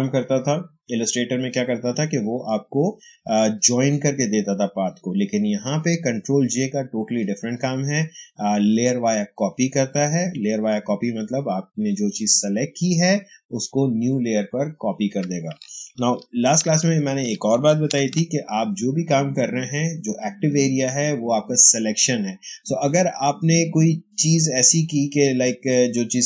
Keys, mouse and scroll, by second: 16.6 ctrl+alt+z, 17.9 ctrl+d.